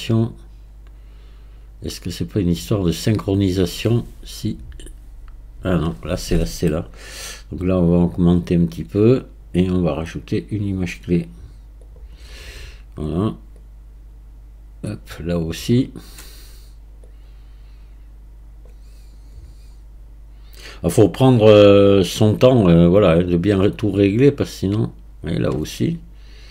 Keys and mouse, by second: 8.0-9.6 drag, 10.3-12.0 right drag, 13.6 click, 17.1-18.7 drag, 19.2-21.8 right drag, 23.6 click.